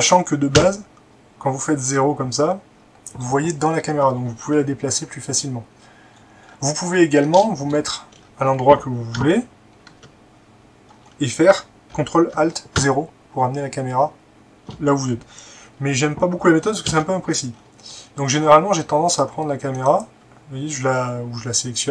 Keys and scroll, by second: 0.6 0, 9.2 0, 11.8 typing, 12.8 ctrl+alt+0, 16.9 ctrl+z.